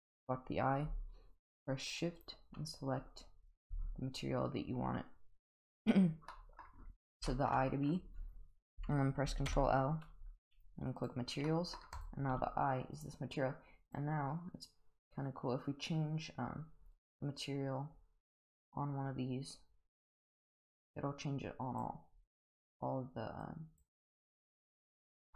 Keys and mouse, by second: 2.2 shift+click, 6.3-6.6 middle drag, 7.3 shift+middle drag, 9.5 ctrl+l, 11.5 middle drag, 12.0 click, 12.3 g, 13.9 click.